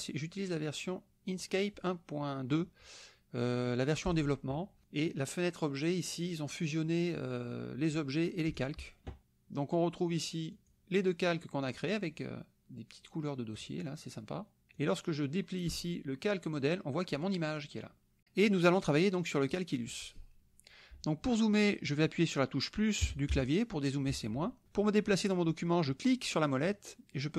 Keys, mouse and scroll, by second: 1.4 click, 4.0 click, 4.8 click, 8.6 click, 9.2 click, 10.5 click, 11.3 click, 11.8 click, 13.6 click, 14.7 click, 15.7 click, 17.1 click, 18.6 click, 23.0 KP_Add, 24.1 KP_Subtract, 26.4-27.3 drag.